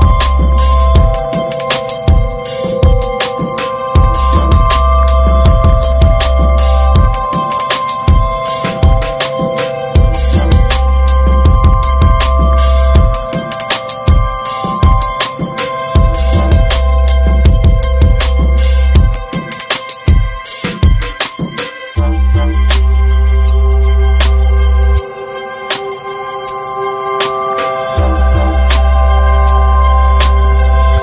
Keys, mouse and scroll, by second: 0.0 ctrl+s, 0.5 drag, 1.2 `, 1.6-2.0 right drag, 2.0 click, 2.4 click, 3.0 Tab, 3.4 middle click, 3.7 Tab, 4.0-4.7 middle drag, 4.7-5.0 scroll up 3, 5.0 Tab, 5.3 middle click, 5.4-6.2 scroll up 4, 5.6 shift+middle click, 6.2 middle click, 7.0 ctrl+r, 11.0 Tab, 11.2 scroll down 2, 11.4-11.8 middle drag, 11.8 scroll up 2, 12.1 shift+middle click, 12.4 Tab, 12.6-14.4 middle drag, 14.4 click, 14.9 alt+shift+click, 15.4 alt+middle click, 15.6 alt+z, 16.1 shift+middle click, 16.8 click, 17.8 alt+z, 18.0-19.2 middle drag, 19.2 ctrl+r, 20.2 scroll down 2, 20.3 middle click, 20.6 Tab, 21.1-21.8 middle drag, 21.8 scroll up 1, 22.1 Tab, 22.3 middle click, 22.4 scroll up 2, 23.2 ctrl+r, 25.1 click, 25.6 ctrl+z, 25.9 ctrl+z, 26.2 click, 26.9 middle click, 27.3 s, 28.2-29.7 middle drag, 29.7 ctrl+b.